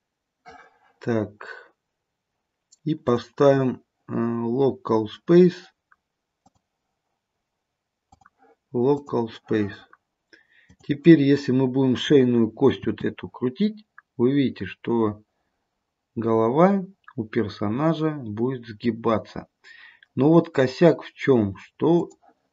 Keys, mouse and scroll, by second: 3.2 click, 8.2 click, 10.7 click, 12.9 r.